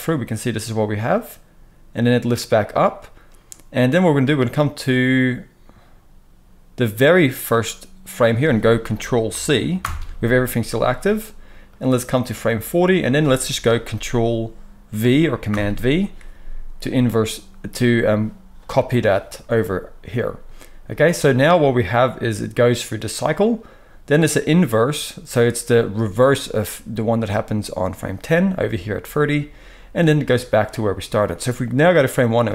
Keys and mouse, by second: 9.8 ctrl+c, 11.7-32.5 drag, 15.5 ctrl+v, 32.4 space.